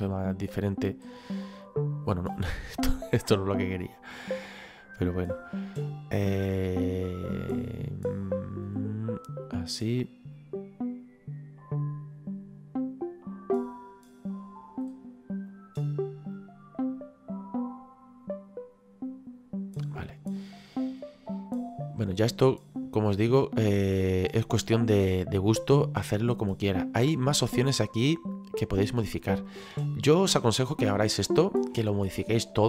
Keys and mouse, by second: 2.0 click, 9.6 click, 15.5 click, 20.3 middle click, 22.3 click, 24.2 click, 25.8 middle click, 29.1 click, 31.0 shift+middle click, 32.2 shift+middle click.